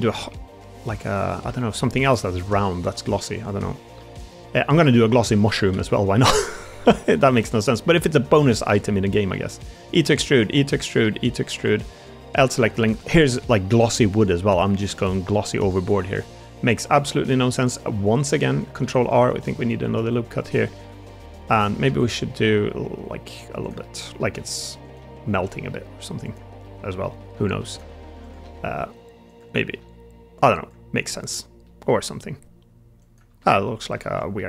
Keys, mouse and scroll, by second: 1.1 middle click, 1.2 click, 1.5 shift+click, 1.8 click, 2.1 Tab, 2.6 middle drag, 3.0 Tab, 4.0 3, 4.4 middle click, 4.8 middle click, 5.2 shift+d, 5.6 s, 6.6 click, 6.7 middle click, 7.1 shift+middle click, 9.9 e, 12.3 e, 12.3 l, 12.9 a, 13.2 g, 14.6 shift+middle click, 14.9 g, 16.1 middle click, 16.7 click, 17.8 click, 18.2 shift+click, 18.7 ctrl+r, 20.8 click, 21.5 click, 21.8 2, 22.3 g, 23.7 click, 24.1 r, 24.9 g, 26.5 middle click, 26.9 shift+middle click, 27.8 1, 28.3 g, 29.4 middle click, 29.7 g, 31.0 middle click, 31.5 middle click, 33.3 middle click, 33.3 g, 33.9 ctrl+z, 34.3 middle click.